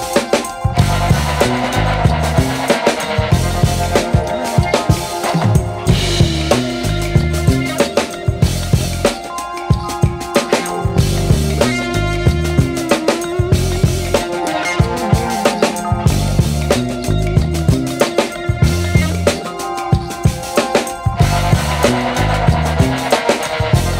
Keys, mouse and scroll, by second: 1.3-2.3 scroll up 1, 3.4 click, 7.8 click, 11.8 click, 13.1 scroll up 1, 13.8 click, 22.6 click, 23.3 scroll down 1.